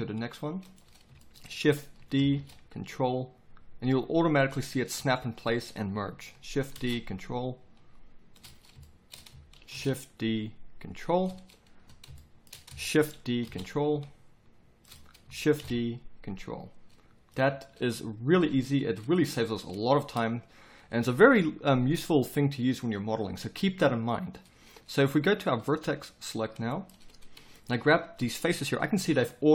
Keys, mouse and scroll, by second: 2.2 shift+d, 6.6 shift+d, 13.1 shift+d, 18.3 z, 26.2 click, 26.3 middle click, 26.4 click, 26.7 middle click, 29.0 g.